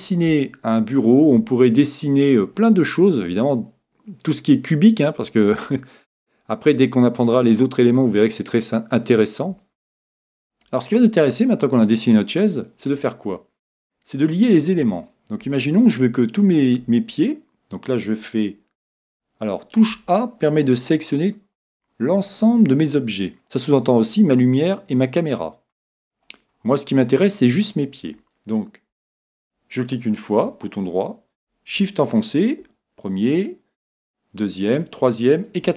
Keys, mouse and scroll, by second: 11.0-12.9 middle drag, 16.4 right click, 18.9 a, 19.9 a, 20.4-23.4 middle drag, 25.8-29.2 middle drag, 29.0 right click, 32.8 right click.